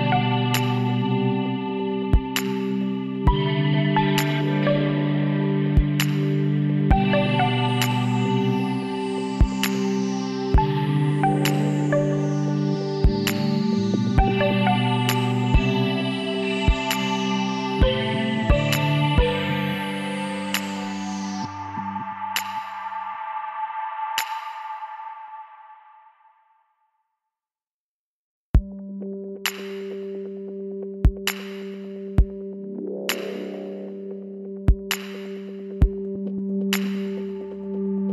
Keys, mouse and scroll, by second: 0.4-2.2 drag, 6.4-10.0 middle drag, 10.0-12.0 drag, 12.0 right click, 12.8 b, 16.4 s, 18.9 click, 19.6-20.7 middle drag, 22.4 z, 23.1 click, 25.8-29.3 middle drag, 29.5-31.3 drag, 30.4-33.2 right drag, 32.4 x, 34.5-38.1 middle drag.